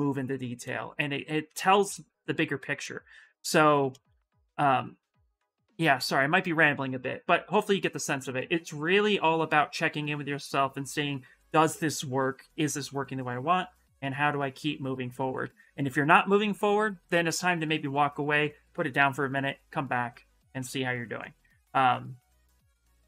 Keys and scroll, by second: 21.9-23.0 typing.